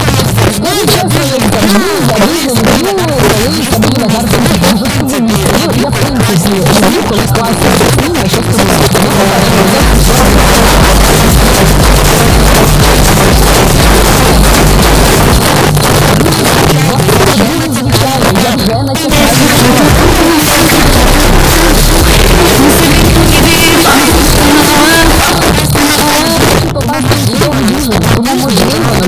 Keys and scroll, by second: 15.4 Page_Down, 25.2 Page_Down.